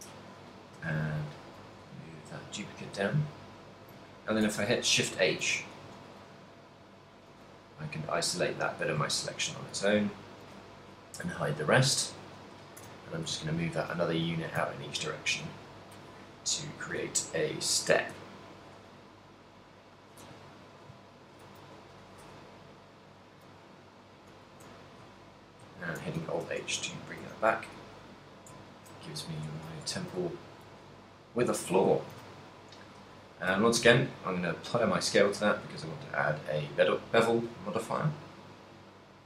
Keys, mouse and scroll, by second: 0.8 KP_3, 1.8 g, 3.1 click, 3.5 z, 4.8 shift+h, 4.8 shift+j, 5.8 a, 6.1 b, 7.7 g, 8.8 click, 9.2 shift+middle click, 10.0 a, 10.5 b, 11.5 g, 12.5 click, 12.9 a, 13.3 KP_7, 14.3 shift+middle click, 15.0 ctrl+middle click, 15.8 b, 17.3 shift+middle click, 18.3 b, 19.0 g, 20.3 click, 20.7 shift+middle click, 21.2 ctrl+middle click, 21.7 a, 22.0 b, 23.8 g, 24.8 click, 25.2 z, 26.2 alt+h, 26.7 middle click, 27.4 a, 27.7 shift+middle click, 28.8 ctrl+middle click, 29.4 middle click, 29.9 Tab, 30.2 a, 30.3 shift+middle click, 30.8 a, 31.2 middle click, 31.8 middle click, 32.1 shift+middle click, 32.3 a, 32.7 right click, 33.9 ctrl+a, 36.3 click, 37.0 click.